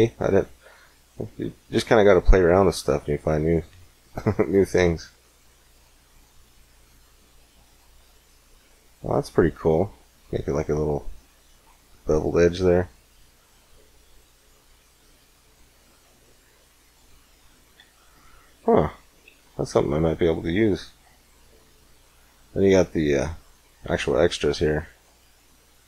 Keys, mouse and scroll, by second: 2.3-3.5 drag, 4.0-7.6 drag, 9.4-11.5 middle drag, 12.5-14.6 drag, 15.8-17.6 middle drag, 17.6 x, 19.1 shift+a.